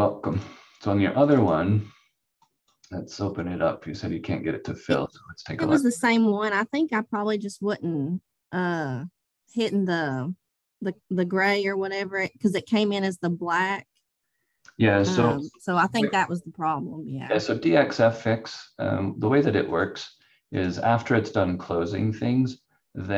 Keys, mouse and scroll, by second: 0.3 click, 6.4 click, 15.3 ctrl+z, 19.7 click.